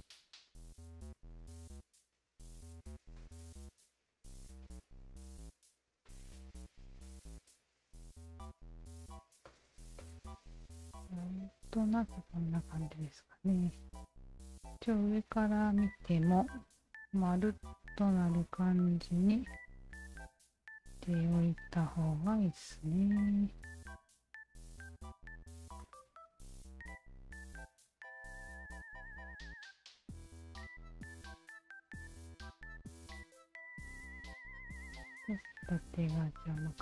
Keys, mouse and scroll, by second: 1.1 alt+right click, 1.9 alt+right click, 3.1 alt+click, 4.3 alt+click, 5.2 alt+click, 5.7-7.1 alt+drag, 7.2 alt+click, 8.2 alt+click, 9.4 alt+click, 9.8 alt+right click, 10.0-13.5 alt+drag, 13.8 alt+right click, 14.2 alt+click, 15.5 alt+click, 15.9 alt+click, 16.8 alt+click, 17.9 alt+click, 19.5 shift+v, 20.8 alt+click, 22.1 w, 22.4 alt+click, 23.0 alt+right click, 23.6 alt+click, 24.2 alt+click, 24.9 alt+click, 25.8-27.2 alt+drag, 28.0 alt+click, 28.7 alt+click, 30.1 alt+click, 31.1 alt+click, 32.1 alt+click, 32.3-34.2 alt+drag, 36.4 alt+click.